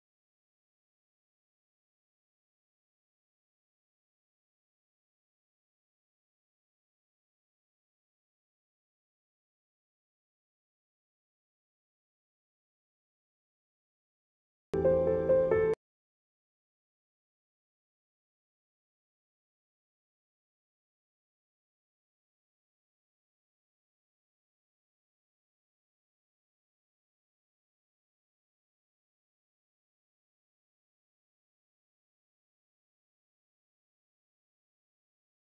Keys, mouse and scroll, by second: 3.2 ., 4.7-5.6 typing, 9.5-12.3 drag, 12.3-13.8 right drag, 13.8 click, 14.3-18.3 right drag, 18.3 click, 20.4 right click, 21.0 click, 21.7 right click, 22.8 click, 24.9-27.1 right drag, 27.1 scroll up 1, 28.0-29.8 scroll up 1, 30.3 right click, 30.8-31.4 scroll down 1, 31.4-31.8 scroll down 1, 31.8 right click, 33.1 scroll up 1, 34.1-34.6 scroll down 1.